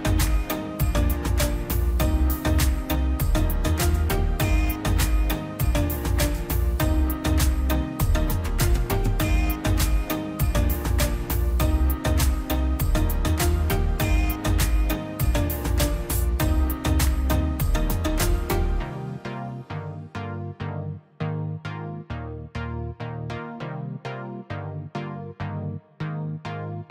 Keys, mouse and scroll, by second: 0.1 scroll down 1, 0.5 click, 0.8-1.2 scroll down 2, 0.9 click, 1.2 middle click, 1.5 scroll up 1, 1.9 middle click, 2.3-2.7 scroll up 1, 3.7 click, 3.9-4.3 scroll down 1, 4.3-4.7 scroll up 1, 5.2 click, 5.8 scroll down 1, 6.4 click, 6.5 scroll up 1, 7.5 click, 7.7 scroll down 1, 8.2 click, 10.5 p, 10.8-13.5 drag, 15.3 scroll down 1, 16.1 middle click, 16.4 scroll up 1, 17.1 click, 17.2-18.0 scroll down 1, 19.6 right click, 20.5 click, 21.8 right click, 22.4 click, 23.9 scroll up 1, 24.7 click, 24.9-25.3 scroll down 1, 25.8 click, 26.0 scroll down 1, 26.5 click, 26.8-26.9 scroll down 2.